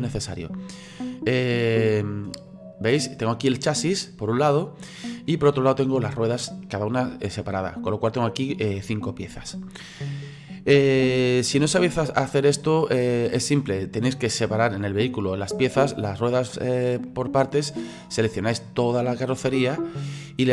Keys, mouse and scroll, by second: 1.7 right click, 2.5 click, 3.3-11.0 middle drag, 11.0 ctrl+z, 13.3-18.3 middle drag, 18.3-20.5 drag.